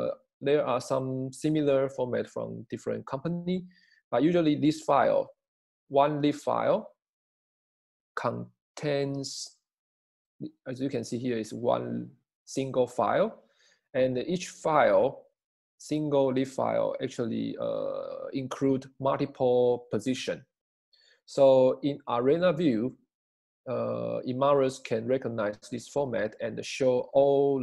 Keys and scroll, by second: 17.7 Page_Down.